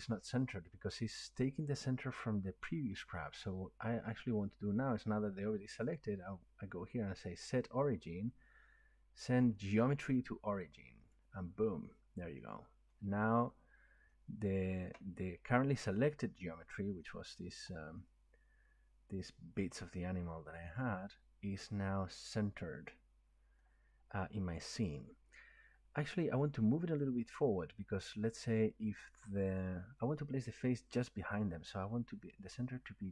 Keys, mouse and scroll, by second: 3.4 middle click, 6.0 click, 11.2 click, 12.9 middle click, 13.4-13.7 scroll up 3, 14.7 shift+middle click, 22.1 shift+middle click, 22.7 shift+middle click, 23.6 middle click, 27.0 click.